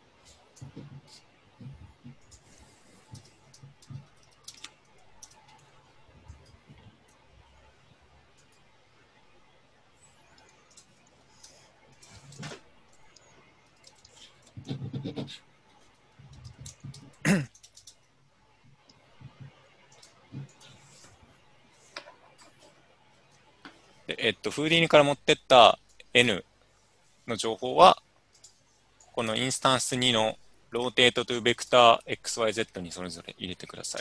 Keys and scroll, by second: 2.9-5.4 typing, 11.5-18.7 typing, 13.9 Tab.